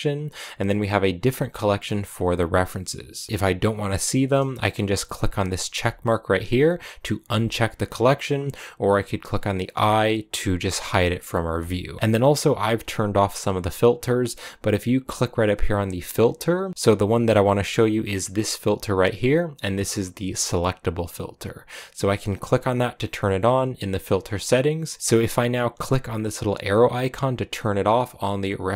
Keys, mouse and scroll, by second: 5.6-10.7 drag, 11.4 click, 25.0-27.3 drag.